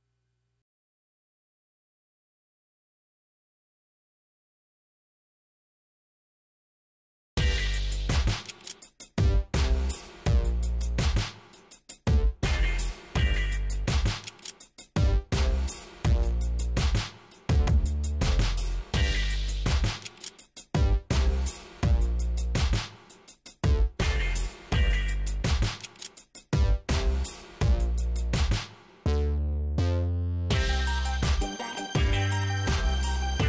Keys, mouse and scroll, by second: 1.4 click, 2.1-3.0 typing, 4.1 click, 6.1 click, 7.7 click, 9.0 click, 9.7 click, 11.1 click, 14.4 click, 15.4 scroll up 1, 17.1 click, 17.7 shift+right click, 21.0 ctrl+click, 22.8 click, 25.5 KP_1, 25.6 ,, 25.7 KP_5, 28.0 click, 29.0 shift+right click, 30.5 middle click, 32.8 click, 33.3 shift+right click.